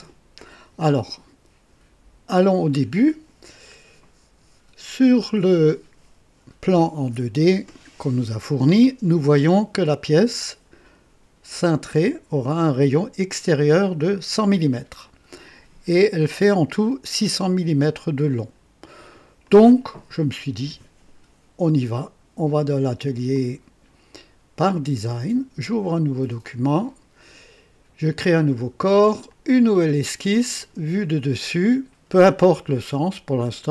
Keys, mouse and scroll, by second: 2.4 click, 19.5 click, 23.3 click, 24.6 click, 26.4 click, 28.2 click, 29.3 click, 30.6 click, 33.6 click.